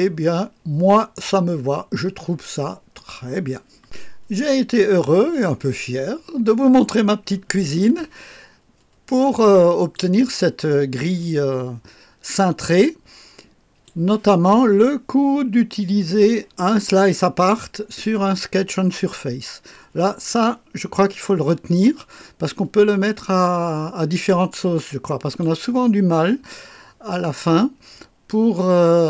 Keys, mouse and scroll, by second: 4.0 click, 4.4-9.9 drag, 11.2-13.8 drag, 14.1 click, 20.2-21.4 drag, 21.9-25.4 drag.